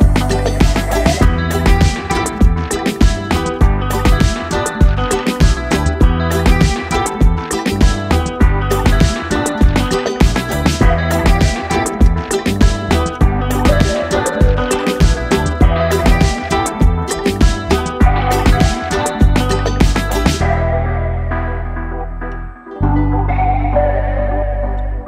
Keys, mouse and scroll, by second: 1.5 click, 4.7-5.4 typing, 5.4 Return, 7.2-9.5 drag, 14.8 1, 15.3 Return, 17.6-22.4 drag.